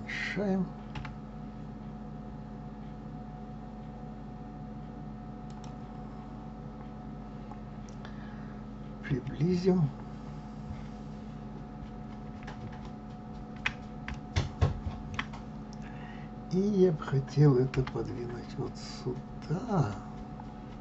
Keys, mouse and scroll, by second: 1.1 s, 9.0 KP_Decimal, 10.0-12.3 scroll down 6, 14.3-17.8 shift+middle drag, 17.8 g.